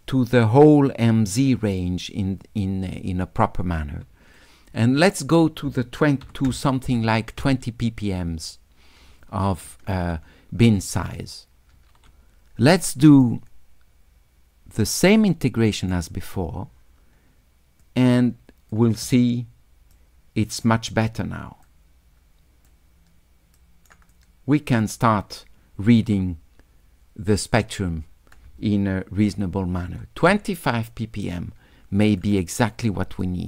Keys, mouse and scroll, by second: 4.4 click, 13.0 s, 13.2-15.9 drag, 17.8 click, 20.0 right click, 21.7-22.7 drag, 23.6 click, 24.2 click, 27.6 click, 32.1 click, 32.4 scroll down 2, 33.0 s, 33.2-33.4 right drag.